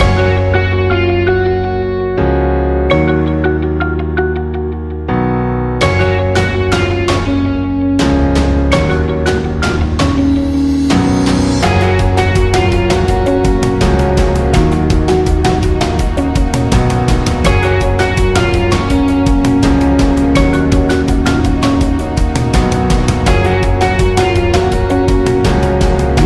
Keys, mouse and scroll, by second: 0.1 click, 3.0 click, 7.7 i, 9.3 click, 12.6 click, 14.8-20.4 drag, 20.4-26.2 drag.